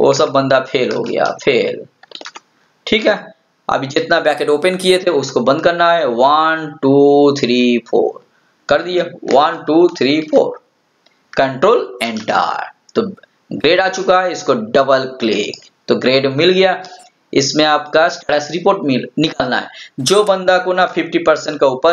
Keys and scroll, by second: 12.1 ctrl+Return.